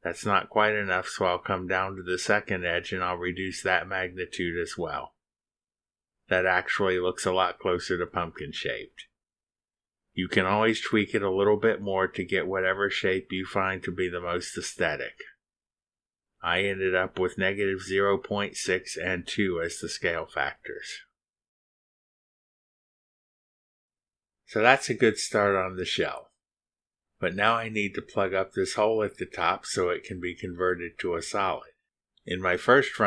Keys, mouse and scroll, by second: 0.1 shift+click, 0.6 shift+click, 1.3-2.1 scroll up 1, 2.7 click, 3.8 2, 5.8 click, 8.3-9.9 middle drag, 8.3-9.9 drag, 10.2 click, 10.3 b, 11.1-20.1 drag, 20.9 click, 23.0 middle click, 23.2-25.0 drag, 25.5 middle click, 26.5 middle click, 26.6 click, 28.2 click, 29.0 middle click.